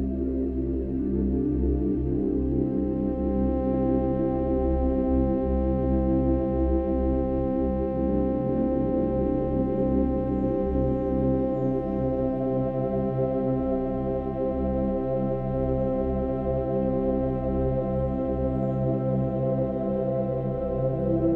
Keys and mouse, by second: 5.4 shift+click, 5.8 shift+click, 6.5 shift+click, 6.8 shift+click, 7.2 shift+click, 7.4 shift+click, 9.9 click, 11.3 click, 13.7 click, 15.5-17.7 drag, 17.7 Left, 19.3 i, 19.9 click, 21.0 Right, 21.2 Right.